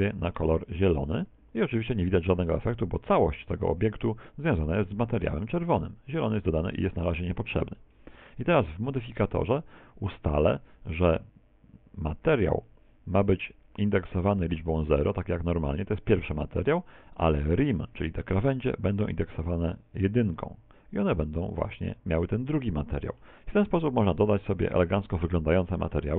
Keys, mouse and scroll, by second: 0.2 click, 2.9 middle click, 3.8 Tab, 4.2 middle click, 5.4 middle click, 9.5 click, 11.2 click, 12.9 click, 16.0 middle click, 19.2 click, 22.5 click.